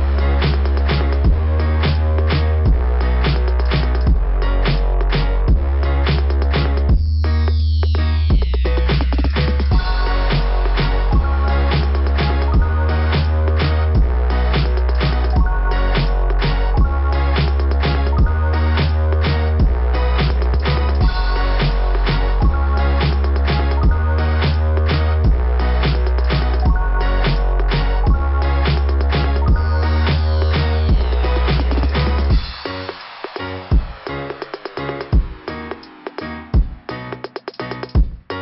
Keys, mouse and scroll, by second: 1.7 scroll down 2, 8.2 click, 20.9 scroll down 1, 21.0-21.4 scroll up 2, 21.4 scroll down 1, 21.5 scroll up 1, 23.6-24.4 scroll down 6, 24.4 scroll up 2, 24.4 scroll down 1, 24.6 scroll up 2, 24.8 scroll down 2, 24.9 scroll up 2, 25.1 scroll down 2, 25.2 scroll up 2, 25.7-26.1 scroll up 2, 27.2 scroll up 2, 27.7 scroll up 1, 28.8 scroll up 1, 30.3-31.5 scroll up 4, 32.4 scroll up 1, 34.2 scroll up 1, 34.7-35.4 scroll up 3.